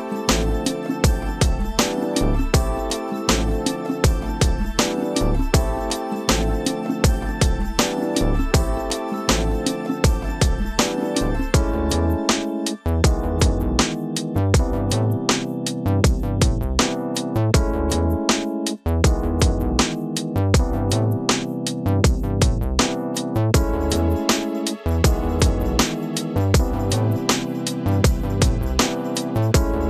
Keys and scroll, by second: 0.6 space, 4.0 space, 5.5 ctrl+KP_Subtract, 16.0 ctrl+KP_Subtract, 18.1 c, 27.3 1.